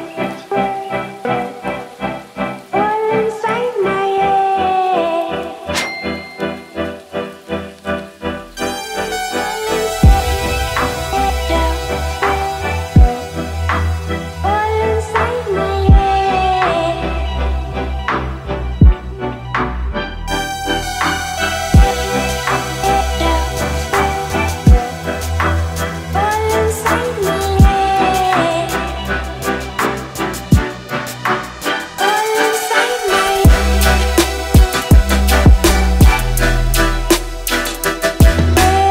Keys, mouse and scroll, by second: 1.0 ctrl+z, 2.3 scroll up 1, 2.8-4.6 middle drag, 3.3-4.1 typing, 4.2 ctrl+d, 4.6 click, 6.4 click, 7.5-10.7 drag, 14.4 ctrl+shift+space, 21.5-24.0 drag, 30.0 Down, 34.2 click, 37.4 Left.